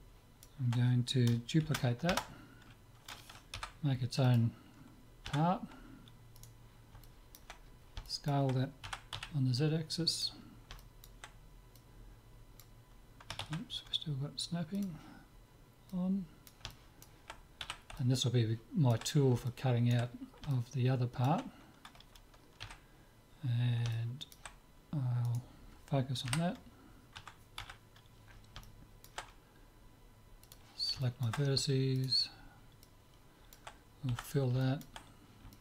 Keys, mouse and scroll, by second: 1.6 shift+d, 3.6 p, 5.3 Tab, 6.4-8.1 right drag, 7.1-8.2 drag, 8.2 right click, 8.9 s, 10.8 middle click, 11.8-13.6 drag, 13.6 ctrl+z, 14.8-17.7 drag, 17.7 z, 17.9-22.5 middle drag, 22.6 KP_Divide, 23.9-25.9 middle drag, 25.3 click, 25.9-27.3 right drag, 26.3 KP_Divide, 27.3 Tab, 27.7 z, 28.6-30.4 middle drag, 30.4-32.4 drag, 31.0-32.4 right drag, 32.4 click, 32.4-35.6 middle drag, 32.9 click, 34.1 f.